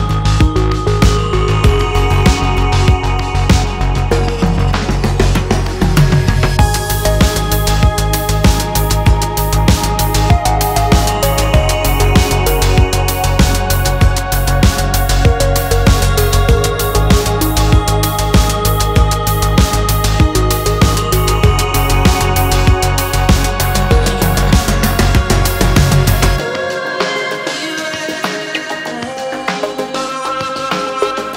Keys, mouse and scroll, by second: 1.3 click, 1.9-2.4 middle drag, 3.1 click, 4.3 click, 4.7 click, 5.5 click, 6.2 click, 6.8-7.6 middle drag, 7.8-8.4 scroll up 1, 9.8-12.3 drag, 12.5-14.9 middle drag, 15.8 click, 17.0 click, 17.6-18.2 middle drag, 19.3 click, 21.0 click, 22.3 click, 22.6 click, 23.4-24.6 middle drag, 24.9-25.5 middle drag, 25.8-26.4 scroll up 2, 26.4-27.1 middle drag, 28.5 click, 30.8-31.1 middle drag.